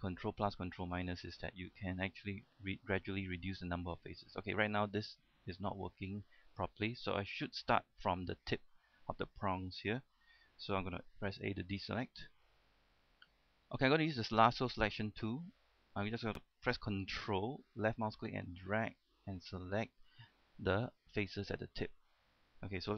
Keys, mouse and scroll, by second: 0.0 shift+middle click, 1.6 shift+middle click, 2.4 ctrl+KP_Subtract, 6.0 shift+middle click, 7.6 middle click, 11.7 a, 12.0-12.3 scroll up 1, 12.6 shift+middle click, 13.3-14.5 middle drag, 18.1-20.3 ctrl+drag, 20.6-22.6 middle drag.